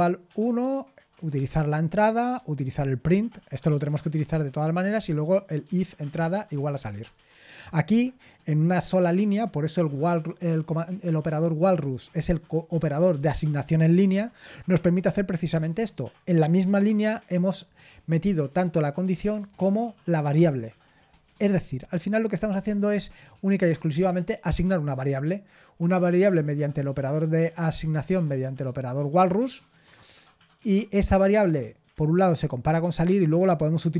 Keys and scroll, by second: 7.7 typing.